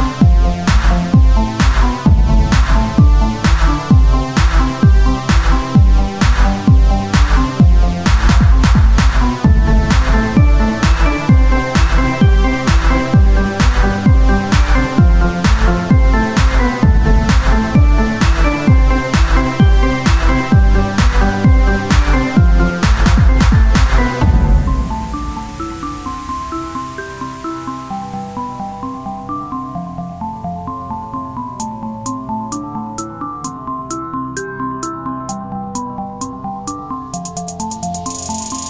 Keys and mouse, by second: 0.4 ctrl+Tab, 1.1-2.6 drag, 2.6 KP_Divide, 3.4 e, 6.2 e, 7.2 ctrl+Tab, 9.4 e, 10.7-16.1 drag, 16.6-19.8 drag, 19.8 Tab, 20.8-32.8 drag, 32.8 Tab, 33.6-35.0 drag, 35.6-38.4 drag, 38.5 Tab.